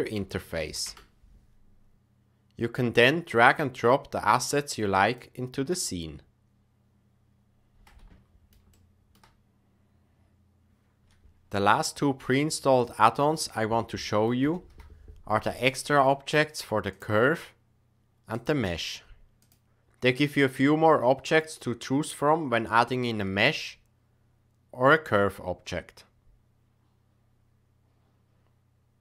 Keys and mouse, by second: 7.8-8.5 middle drag, 8.7-9.1 shift+middle drag, 19.3 click, 21.2-29.0 drag.